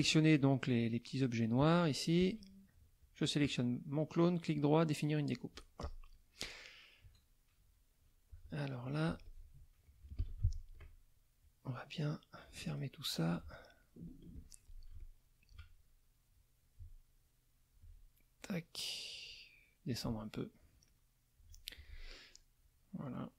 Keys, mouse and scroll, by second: 0.7 click, 3.0 shift+click, 5.8 click, 6.2 middle click, 7.0 KP_Subtract, 8.6 click, 9.1 z, 9.2 click, 10.2 F2, 10.7 click, 11.4-12.7 drag, 13.3 click, 14.3 shift+click, 15.0 shift+click, 16.3-17.9 drag, 18.4-19.4 drag, 19.9-21.5 alt+drag, 22.5 click.